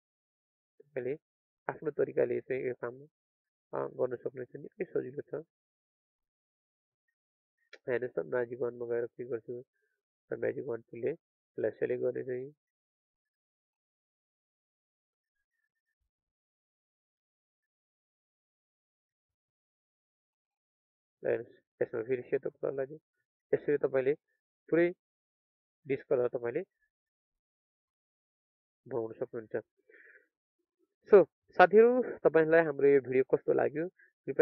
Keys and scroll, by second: 1.0 ctrl+space, 3.6 ctrl+alt+space, 13.2 ctrl+space, 22.4 alt+Delete, 23.4 ctrl+d, 24.7 ctrl+alt+space, 26.4 ctrl+space, 28.2 ctrl+d.